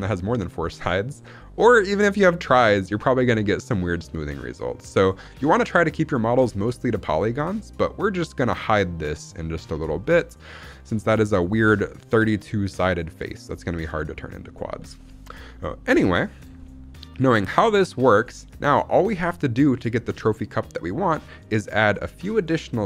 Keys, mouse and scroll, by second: 1.1-1.9 scroll up 2, 1.9-2.4 scroll down 2, 2.4-3.6 middle drag, 3.8-5.1 middle drag, 5.4-6.8 scroll up 1, 6.9-7.7 shift+middle drag, 9.1-9.6 scroll down 2, 9.6 scroll up 1, 9.9 shift+middle drag, 10.8-12.3 shift+middle drag, 14.4-14.9 scroll down 1, 14.9-15.8 scroll up 2, 15.8 KP_1, 16.5-17.2 shift+middle drag, 17.2 scroll up 1, 17.5 shift+middle drag, 17.9 scroll up 1, 18.3-19.2 shift+middle drag, 19.2-20.2 scroll down 1.